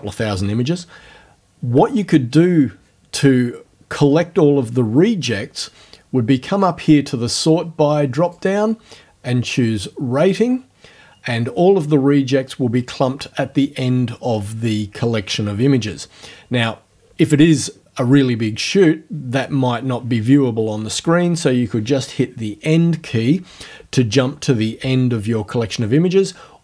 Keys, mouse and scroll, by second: 8.2 click, 10.2 click.